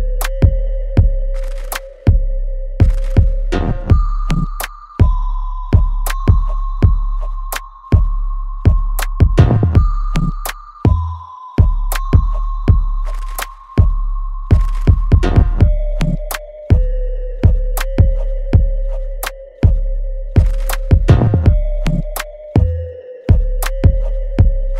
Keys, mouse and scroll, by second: 3.2 click, 7.7-18.1 ctrl+drag, 18.1-21.3 ctrl+drag, 21.3-24.5 ctrl+drag, 24.5 alt+right click.